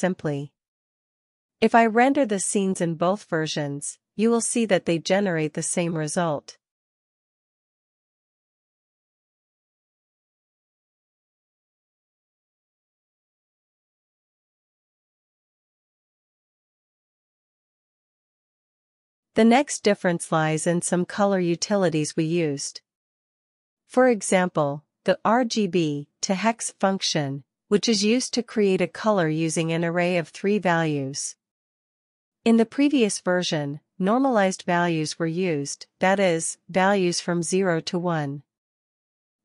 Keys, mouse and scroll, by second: 0.0-7.8 typing, 8.2 Return, 9.5 typing, 11.8 typing, 12.4 alt+shift+f, 13.2-15.3 typing, 18.2 alt+q, 19.1 alt+shift+f, 19.9 ctrl+b, 20.0-20.6 typing, 21.0 alt+shift+f, 23.4-31.4 typing, 27.2 Escape, 33.7 alt+shift+f, 35.1 BackSpace, 35.3 BackSpace, 35.7 Return.